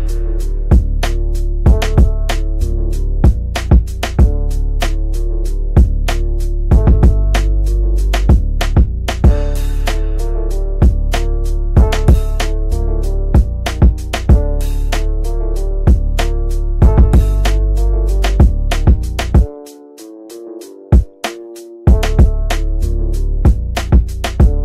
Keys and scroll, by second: 9.7 c.